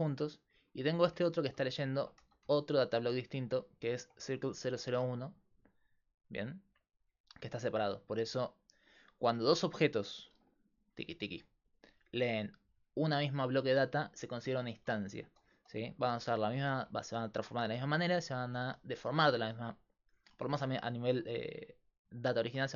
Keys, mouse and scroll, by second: 0.3 click, 1.2 Tab, 1.4 a, 2.2 g, 4.0 Tab, 10.4-13.7 d, 10.6-13.6 drag, 15.8 ctrl+z, 16.5 ctrl+z, 17.1 ctrl+z, 17.7 ctrl+z, 17.7 click, 18.5 ctrl+z, 19.2 ctrl+z, 19.9 ctrl+z.